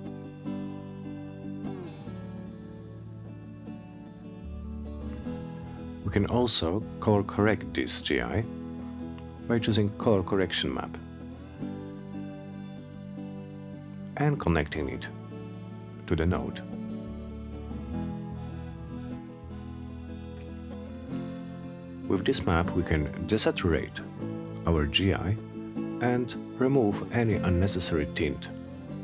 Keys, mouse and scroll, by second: 2.5 click, 4.3 click, 5.5-6.5 drag, 7.5-9.0 typing, 10.4-11.5 drag, 12.7 click, 13.8 click, 15.1 click, 16.2 click, 16.4 click, 18.6 click, 20.2-22.3 typing, 24.3-26.0 drag, 27.1-29.0 drag.